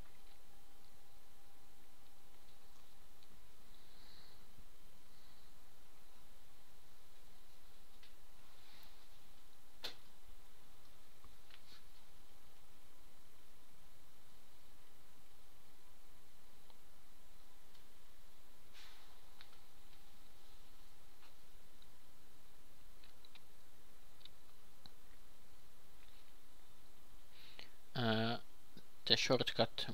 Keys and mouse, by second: 6.4 r, 9.5 r, 13.8 shift+d, 14.3 r, 17.3 r, 24.3-29.6 drag, 28.1 ctrl+t, 29.4 shift+s.